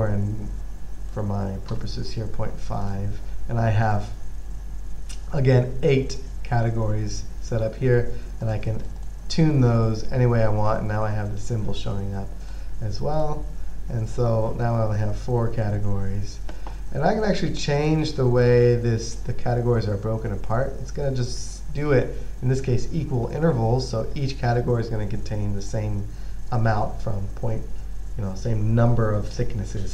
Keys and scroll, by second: 2.0 typing.